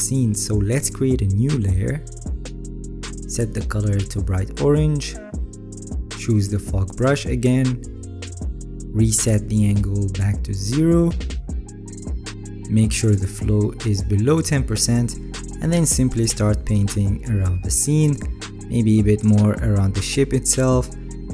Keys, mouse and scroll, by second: 12.6 alt+right click, 15.2 alt+right click, 15.4 alt+right click, 15.8 alt+right click, 16.5 alt+right click, 17.0 alt+right click.